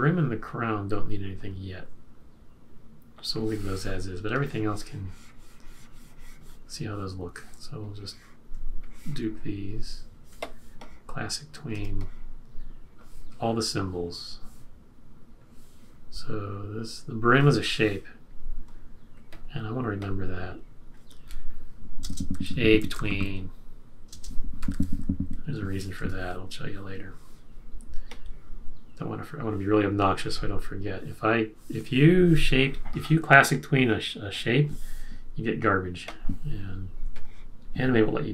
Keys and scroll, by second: 22.0-26.0 typing, 27.4 typing.